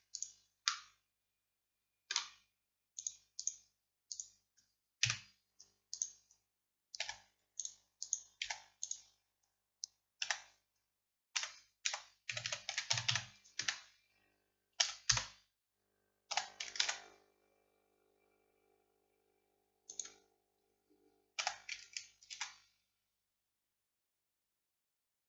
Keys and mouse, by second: 5.1 KP_7, 7.1 x, 8.5 x, 10.3 a, 11.4 r, 14.9 e, 16.4 s, 21.5 s.